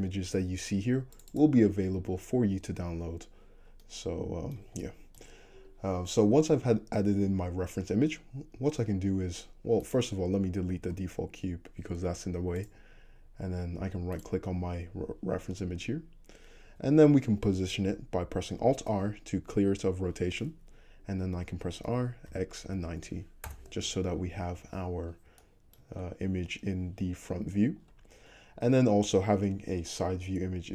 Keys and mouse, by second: 5.6-9.9 middle drag, 9.9-14.3 drag, 10.9 x, 14.3-25.3 middle drag, 19.0 alt+r, 21.9 r, 24.6 `, 25.3-25.8 shift+drag, 25.8-30.7 middle drag.